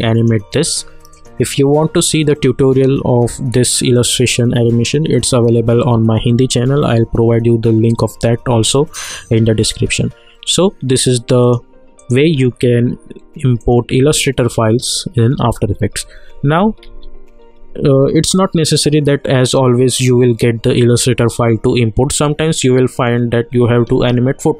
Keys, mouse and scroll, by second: 5.1 click, 11.4 click, 15.9 ctrl+z, 16.8 ctrl+z.